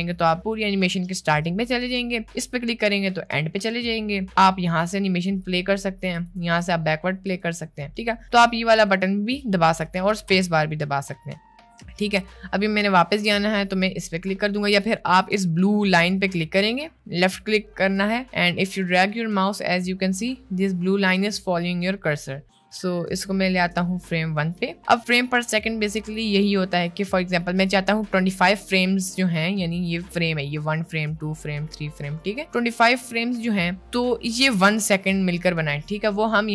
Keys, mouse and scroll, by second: 2.5 click, 4.8 click, 5.6 click, 6.2 click, 6.6 click, 7.4 click, 9.9 click, 10.3 space, 11.9 space, 16.5-24.5 drag, 26.2-27.6 drag, 29.9 click, 33.3 click, 33.8 click.